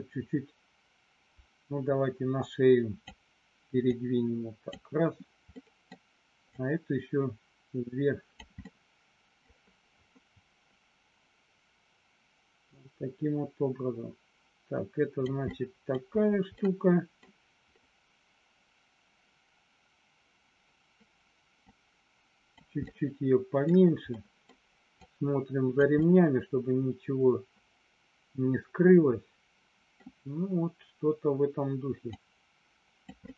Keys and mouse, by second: 3.8 click, 5.6 middle click, 6.5-8.3 drag, 8.6 middle click, 12.7-15.2 drag, 15.5 middle click, 16.5 middle click, 21.6 click, 22.7 middle click, 24.1 middle click, 25.0 click, 26.0-30.0 middle drag, 32.2 click, 33.2 middle click.